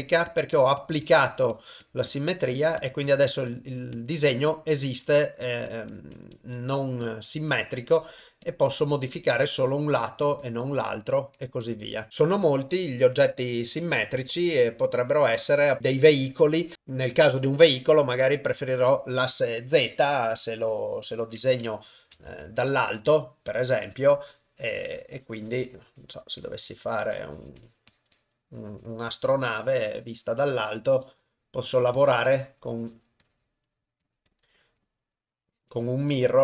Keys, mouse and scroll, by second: 0.0 click, 0.3 click, 0.5 click, 0.8 click, 1.0 click, 1.3 click, 1.5 click, 1.8 click, 2.1 click, 2.3 click, 2.5 click, 2.8 click, 3.1 click, 3.3 click, 3.5 click, 3.7 click, 3.9 click, 4.2 click, 4.5 click, 4.8 click, 5.1 click, 5.4 click, 5.7 click, 5.9 click, 6.2 click, 6.3 click, 6.5 click, 6.8 click, 7.0 click, 7.3 click, 7.5 click, 7.7 click, 8.0 click, 8.2 click, 8.4 click, 8.7 click, 8.9 click, 9.1 click, 9.4 click, 9.7 click, 10.0 click, 10.2 click, 10.4 click, 10.6 click, 10.8 click, 11.4 click, 11.6 click, 11.8 click, 12.9 Tab, 13.8 a, 14.4 x, 15.8 click, 21.6 Tab, 22.2 ctrl+Tab, 24.3 click, 24.7 click, 25.4 click, 25.6 click, 26.0 click, 26.4 click, 26.7 click, 26.7 click, 27.0 click, 27.1 click, 27.3 click, 27.6 click, 27.9 click, 28.1 click, 28.8 click, 29.2 click, 29.5 click, 30.3 click, 31.3 click, 31.6 click, 31.9 click, 32.4 click, 32.7 click, 33.2 click, 34.0 click, 34.3 click, 34.5 click, 34.8 click, 35.1 click, 35.7 click, 36.1 click.